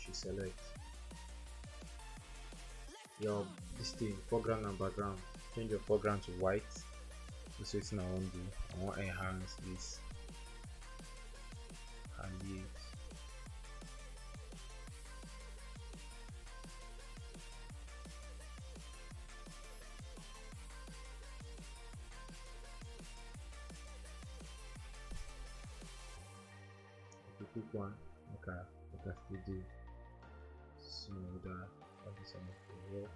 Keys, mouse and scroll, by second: 2.5-3.4 typing, 6.6-9.2 typing, 26.5-27.3 scroll up 1, 27.1-27.9 typing, 29.8-31.1 typing.